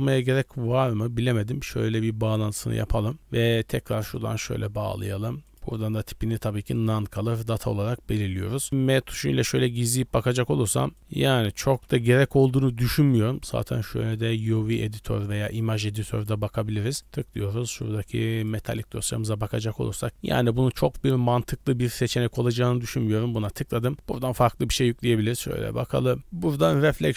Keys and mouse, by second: 3.2 click, 4.1 drag, 4.2-5.1 drag, 5.5-6.9 drag, 8.6 click, 9.0 m, 11.0 m, 11.2 m, 11.6 m, 11.8 m, 14.4 click, 15.5-16.3 drag, 17.0-18.6 drag.